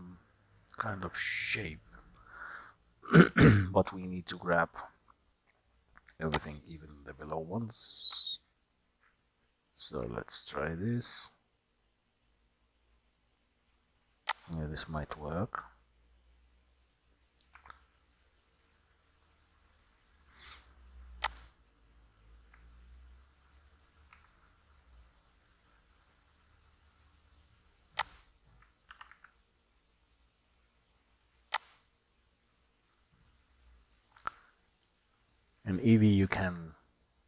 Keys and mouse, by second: 4.6 click, 5.3 middle click, 6.6 shift+click, 8.9 middle click, 10.0 s, 17.7 Tab, 18.8-20.8 middle drag, 24.2 s, 28.9 g, 35.7-37.2 middle drag.